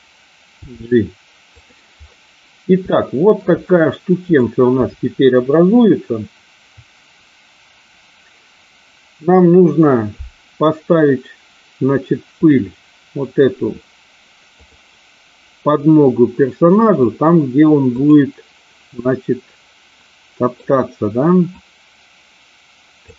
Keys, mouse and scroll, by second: 0.7 g, 1.4 click, 2.8 shift+middle click, 4.4-8.4 drag, 12.3 click, 14.7 click, 16.2-17.0 middle drag, 17.9 click, 19.2-20.8 middle drag, 21.6-23.1 drag.